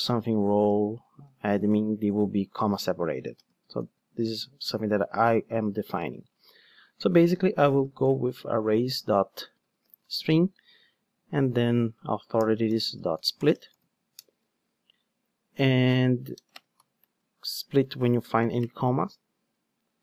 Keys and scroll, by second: 7.0 super+x, 10.2 Return.